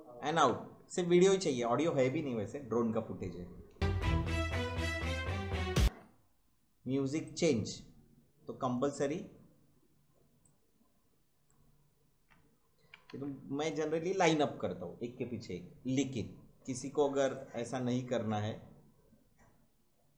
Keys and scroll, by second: 3.7 space, 5.8 space, 13.0 ctrl+z.